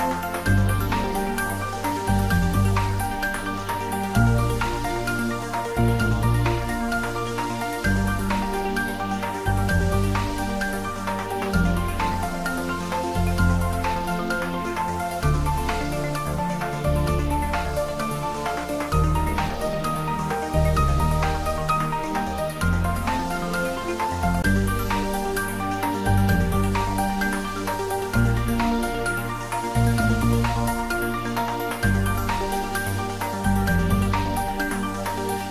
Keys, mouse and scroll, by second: 1.6 click, 2.5 scroll down 1, 4.0 scroll up 1, 4.7-7.0 middle drag, 6.8-7.9 typing, 10.3-17.2 middle drag, 18.3 click, 19.4-19.9 scroll down 1, 20.6 shift+d, 21.0 r, 24.9 click, 25.4-26.3 typing, 31.2-33.5 drag, 34.0 shift+z, 34.7 click.